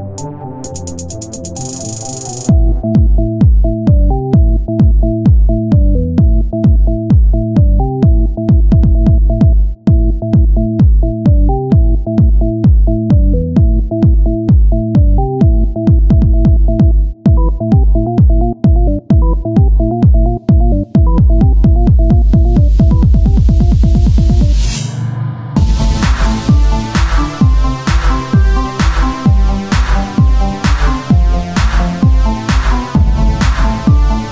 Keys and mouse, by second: 0.1 click, 0.2 KP_1, 0.3 click, 1.5 shift+d, 6.2 KP_3, 10.2 z, 10.6 c, 12.1-14.4 drag, 12.1 z, 16.2 KP_1, 17.8-19.5 right drag, 19.2-20.4 drag, 20.0 r, 21.7 click, 22.7 right click, 23.7 click, 23.7 right click, 25.4-27.1 drag, 27.6 right click, 30.0-34.3 drag.